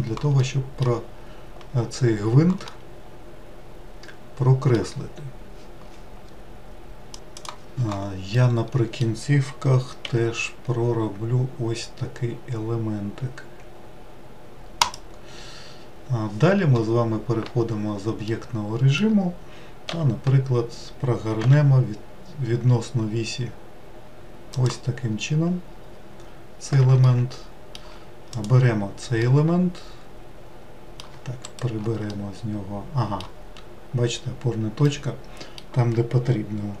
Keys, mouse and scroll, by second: 0.4 middle click, 1.1-2.7 scroll down 3, 2.7-5.8 middle drag, 8.2-10.0 middle drag, 10.0 e, 17.3 Tab, 18.2-19.8 middle drag, 19.8 r, 25.2-26.1 scroll down 7, 26.9-28.2 shift+middle drag, 28.2 click, 29.1-31.3 middle drag, 31.3 shift+right click, 32.0-36.8 middle drag.